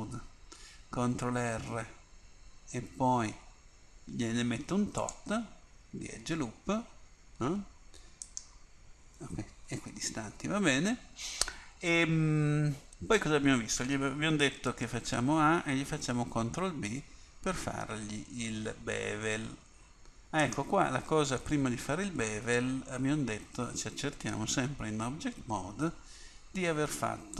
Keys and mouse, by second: 1.2 ctrl+r, 14.8 a, 15.1 a, 16.7 ctrl+b, 24.5 Tab.